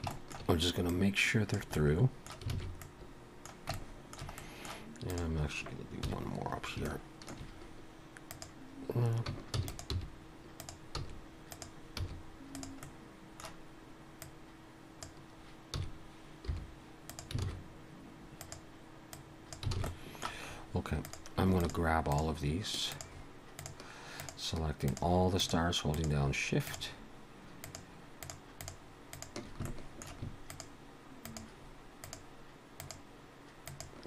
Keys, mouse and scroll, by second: 0.1 shift+middle click, 0.9 click, 1.8 middle click, 2.5 alt+a, 2.8 scroll up 1, 2.9 middle click, 3.7 shift+middle click, 4.4 middle click, 5.1 click, 6.1 KP_1, 6.9 shift+middle click, 8.3 click, 9.6 shift+d, 9.9 g, 11.0 s, 12.0 r, 12.8 middle click, 14.2 click, 15.8 s, 17.5 alt+a, 18.4 click, 19.1 click, 19.8 alt+a, 19.8 alt+s, 19.9 middle click, 20.5 scroll up 1, 21.1 click, 21.6 shift+click, 23.5 click, 24.1-29.5 shift+click, 29.7 shift+middle click, 30.5 shift+click.